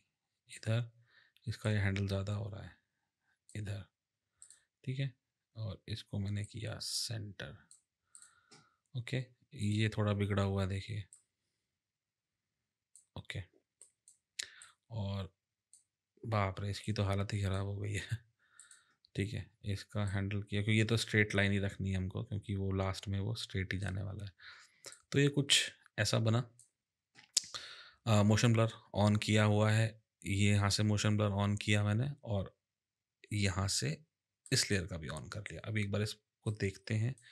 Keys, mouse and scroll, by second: 1.7 click, 4.4 click, 6.5 click, 8.1 click, 11.1 click, 13.8 click, 14.6 click, 16.8 click, 18.5 click, 20.1 click, 24.9 click, 34.4 click, 36.5 click.